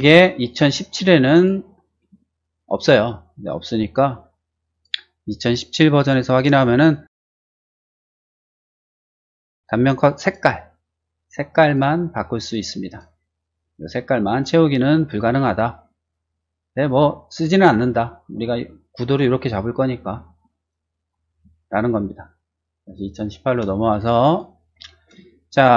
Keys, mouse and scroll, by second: 1.3 click, 2.1 shift+middle click, 2.8 shift+middle click, 4.7 click, 6.1 click, 7.8 click, 8.3 click, 10.2 click, 11.5 click, 12.1 click, 12.8 click, 16.7 middle click, 17.4 scroll up 2, 17.7 middle click, 18.0 shift+middle click, 18.6 shift+middle click, 20.5 middle click, 21.0 middle click, 21.3 middle click, 21.6 shift+middle click, 22.8 shift+click, 23.7 shift+middle click, 24.4 shift+middle click, 24.9 shift+middle click, 25.2 shift+middle click.